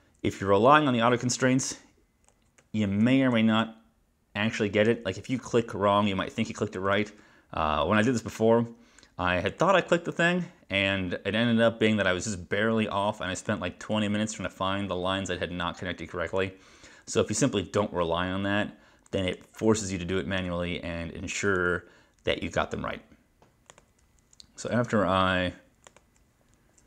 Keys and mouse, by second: 2.7 ctrl+shift+-, 3.4 -, 3.7 -, 6.8 click, 8.3 click, 9.6 click, 13.5 click, 16.4 click, 19.4 click, 21.6 click, 23.8 click, 25.9 click.